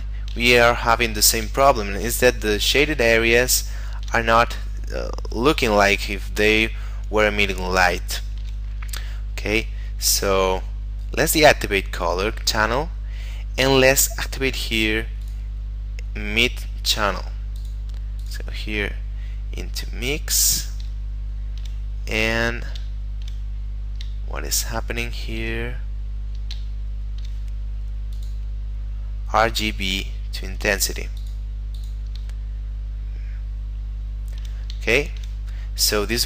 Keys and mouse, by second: 0.7 middle click, 1.7 shift+middle click, 3.8 shift+middle click, 7.8 shift+middle click, 11.4 click, 15.3 click, 17.7 click, 20.1 middle click, 21.2 shift+middle click, 22.0 middle click, 23.1 shift+middle click, 23.6 middle click, 24.4 shift+middle click, 25.6 middle click, 26.9 shift+middle click, 28.2 click, 31.2 click, 32.5 shift+middle click, 35.0 shift+middle click.